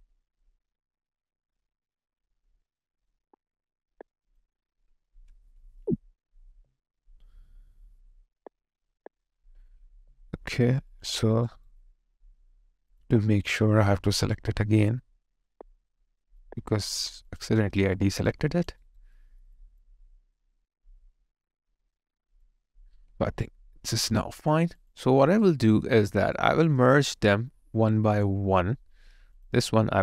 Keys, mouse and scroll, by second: 6.6 alt+click, 10.0 alt+right click, 11.8 alt+middle click, 14.3 shift+click, 18.0 alt+right click, 19.2 alt+middle click, 19.5 alt+click, 23.5 alt+right click, 24.1 alt+click, 25.4 alt+right click, 25.9 alt+middle click, 26.3 alt+right click, 26.8 alt+middle click, 27.3 alt+click.